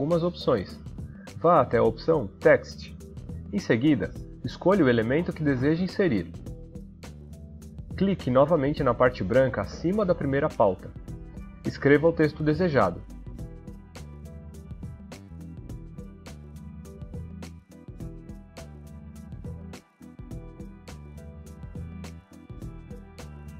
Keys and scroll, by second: 12.3-15.8 typing.